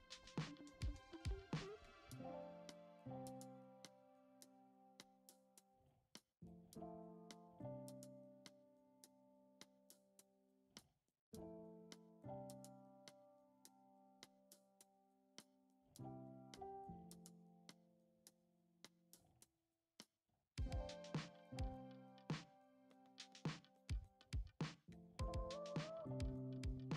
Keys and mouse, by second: 2.1 s, 4.0 click, 4.6 s, 5.8-6.8 right drag, 7.3 s, 9.3 g, 10.5 s, 11.8 s, 13.2 g, 15.2 click, 15.8 middle click, 16.6-16.9 shift+middle drag, 18.1-18.5 shift+middle drag, 19.9 shift+a, 21.7 g, 23.1 Tab, 24.0 click, 24.3 middle click, 25.6 KP_7, 26.3-26.9 drag.